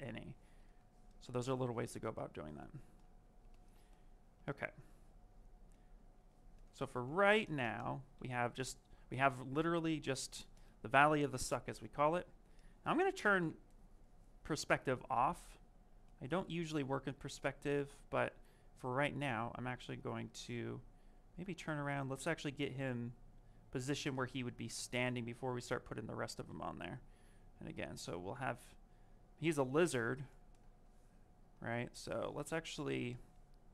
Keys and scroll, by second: 29.5 q.